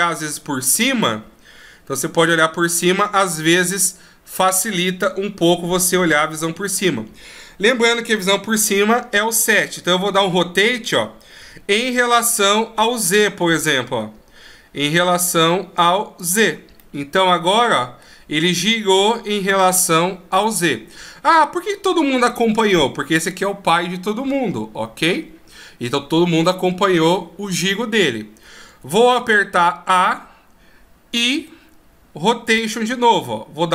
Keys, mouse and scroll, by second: 3.1 middle click, 5.3 KP_1, 6.5 KP_7, 17.1 middle click, 20.7 middle click, 29.5 a, 31.6 i.